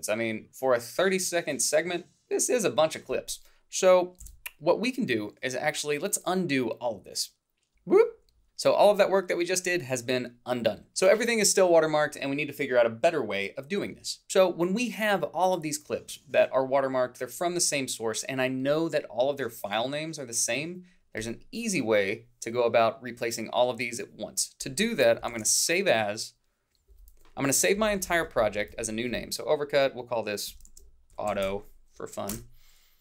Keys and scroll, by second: 27.8 Right, 27.9 Left, 30.5-31.8 typing, 32.3 Return.